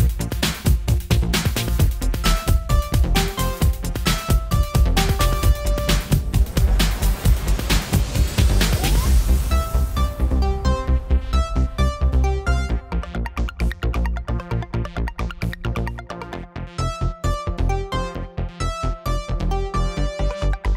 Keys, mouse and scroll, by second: 0.9 middle click, 3.4-5.0 middle drag, 5.0 click, 9.2 middle click, 10.9 middle click, 11.8-12.8 drag, 13.9-15.3 drag, 15.6 middle click, 18.0 shift+z, 19.0 shift+z.